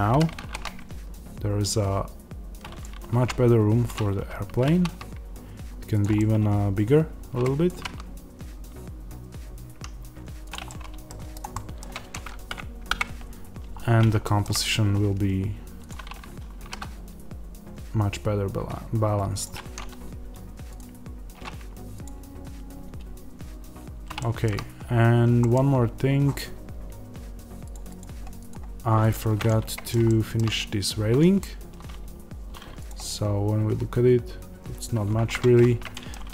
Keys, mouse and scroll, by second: 0.0 g, 2.7 click, 3.0 s, 3.8 click, 4.1 g, 5.9 click, 6.0-10.4 middle drag, 7.6 g, 10.4 click, 10.6 middle click, 11.3 click, 11.4-15.8 middle drag, 12.8 KP_0, 13.7-14.1 scroll down 2, 14.6-15.8 scroll up 2, 15.8 click, 16.5 g, 19.3 click, 24.1-28.4 shift+middle drag, 25.8-28.4 scroll up 2, 28.4 click, 29.3-32.7 middle drag, 30.5-32.7 scroll up 2, 35.2-36.3 middle drag, 35.2-36.0 scroll up 2.